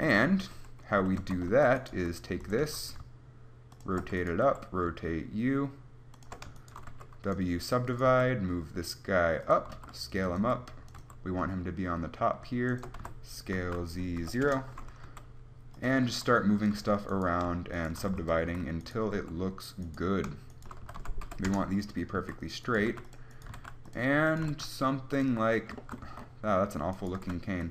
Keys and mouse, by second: 0.3-2.9 typing, 1.5 Tab, 4.8 r, 7.2 w, 8.4 g, 10.0 s, 10.7 g, 13.3 s, 13.3 d, 14.5 click, 15.3 g, 16.1 click, 16.4 s, 17.0 a, 18.3 w, 18.7 a, 19.4 r, 21.1 s, 22.4 a, 23.0 g, 23.8 click, 23.8 g, 24.2 click, 24.6 g, 25.5 Tab, 26.0-27.6 drag, 26.3 Tab, 27.4 g.